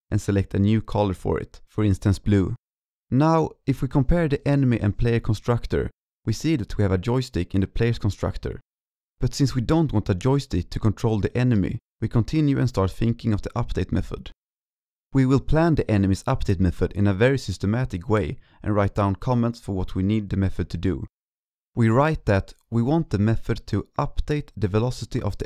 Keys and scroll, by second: 2.7 ctrl+s, 5.1 ctrl+s, 13.3 ctrl+c, 21.8 ctrl+v.